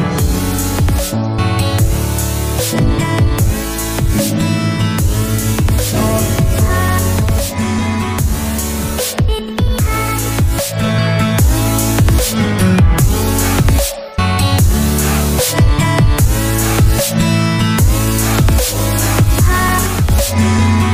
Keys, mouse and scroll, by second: 1.7 double click, 2.0 typing, 2.1 Return, 4.3 double click, 4.6 typing, 4.8 Return, 14.4 middle click.